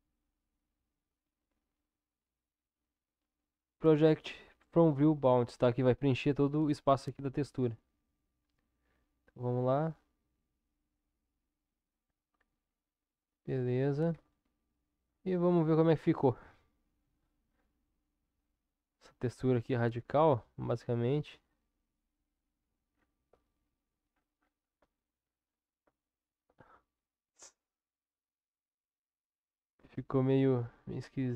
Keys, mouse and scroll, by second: 8.4 u, 14.2 Tab, 16.5-17.1 middle drag, 19.2-22.6 middle drag, 23.5-24.8 middle drag, 26.0 shift+middle drag, 26.6-27.7 middle drag, 28.6-31.3 middle drag.